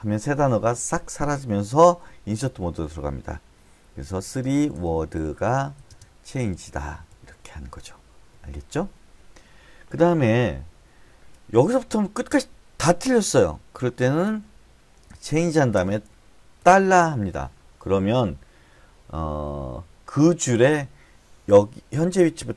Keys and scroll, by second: 4.4-6.7 typing, 15.7 c, 17.0 shift+4.